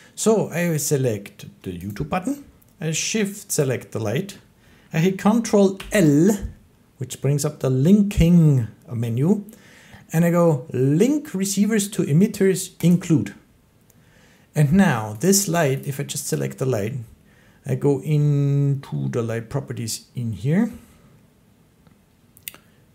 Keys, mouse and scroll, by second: 1.8 click, 3.5 shift+click, 5.6 ctrl+i, 12.8 click, 15.1 click, 15.7 click, 16.2 click.